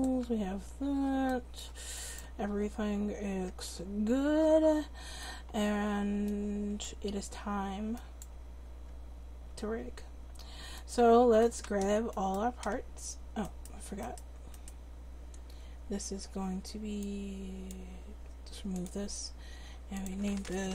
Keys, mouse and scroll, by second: 0.2 Tab, 0.9 Tab, 2.1 click, 2.6 Tab, 3.3 Tab, 10.8 click, 17.0-20.7 drag.